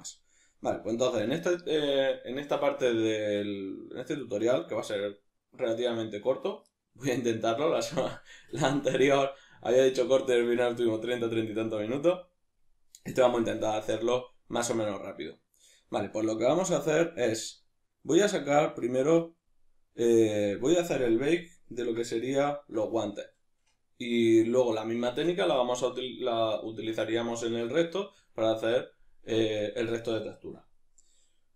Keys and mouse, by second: 0.9-17.4 ctrl+middle drag, 17.4-21.4 drag, 21.4-31.5 ctrl+middle drag.